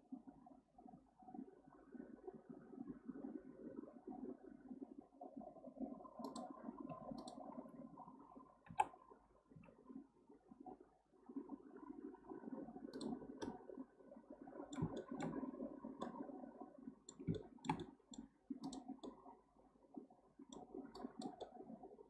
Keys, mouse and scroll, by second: 7.2 click, 8.8 g, 13.2 scroll down 2, 13.4-15.4 middle drag, 15.4-16.0 scroll up 6, 16.0-18.6 middle drag, 18.6 click, 19.0-21.0 middle drag, 21.0 click, 21.4-22.0 middle drag.